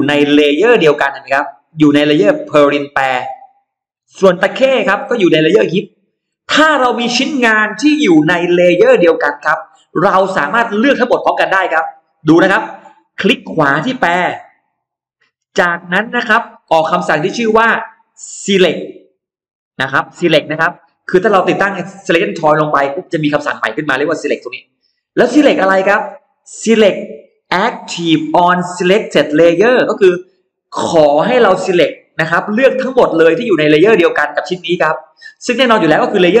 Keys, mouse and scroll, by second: 4.0 click, 13.8 right click.